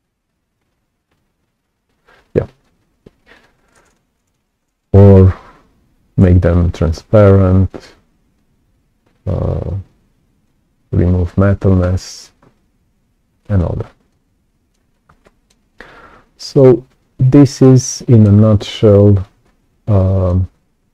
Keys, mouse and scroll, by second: 3.3 click, 4.8-6.8 drag, 7.6 click, 9.6 click, 13.4 right click, 14.0 right click, 14.0 click, 14.8-15.2 scroll down 2, 15.2 right click, 15.6-16.0 scroll up 2, 16.2-18.2 right drag, 16.5-17.6 drag, 18.3-18.7 scroll up 1, 18.8-20.2 right drag, 18.9 click.